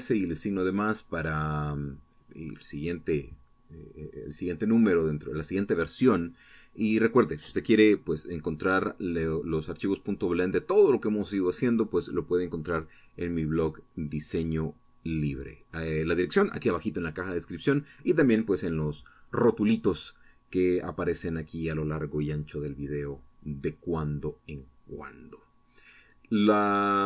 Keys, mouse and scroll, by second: 18.2 click, 19.9 right click.